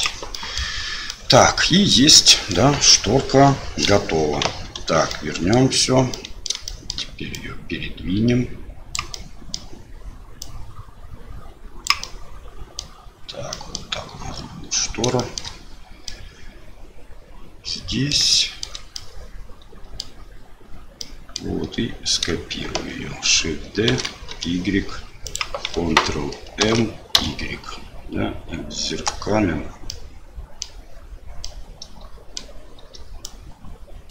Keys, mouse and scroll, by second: 0.3 middle click, 1.0 middle click, 2.3 middle click, 4.4 KP_Divide, 5.1 middle click, 6.1 middle click, 6.6 shift+middle click, 7.3-8.9 drag, 9.2 middle click, 10.5-11.8 drag, 12.1 middle click, 13.5 middle click, 15.2 shift+middle click, 16.1-18.1 middle drag, 18.4 shift+middle click, 19.0-20.0 middle drag, 21.1 middle click, 24.0 shift+d, 26.6 ctrl+m, 30.0 middle click, 31.4 middle click, 33.4 click.